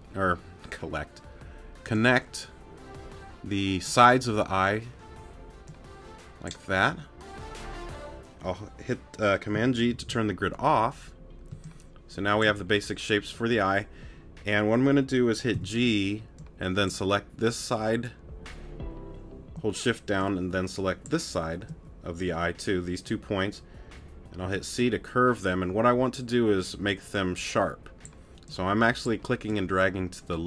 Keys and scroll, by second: 11.5 space, 15.5 g, 24.4 c.